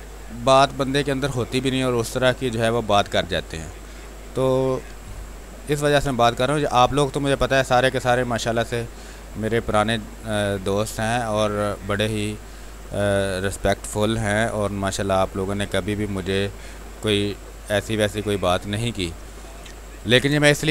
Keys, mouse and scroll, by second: 1.2 space, 1.6 alt+click, 2.7 click, 4.4 click, 4.9 r, 5.1 click, 5.7 b, 6.1 space, 6.3 ctrl+click, 7.7-16.9 drag, 16.9 space, 17.3 alt+click, 18.2 click.